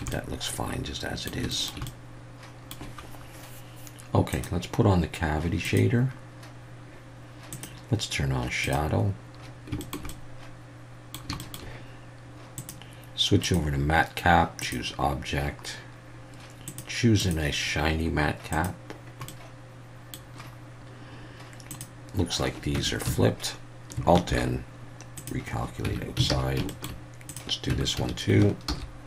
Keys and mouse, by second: 0.1-1.3 middle drag, 1.5 shift+middle drag, 1.8 middle click, 4.3-6.0 drag, 7.5-9.0 drag, 9.8 shift+middle click, 10.1-11.2 middle drag, 11.4 shift+middle click, 12.6-15.6 drag, 16.7-19.0 drag, 19.3-20.1 middle drag, 21.7 click, 22.7 Tab, 23.1 a, 24.3 alt+n, 25.9 Tab, 26.3 alt+a, 26.7 shift+middle drag, 27.3-27.7 drag, 27.7 Tab, 28.0 a, 28.7 alt+n.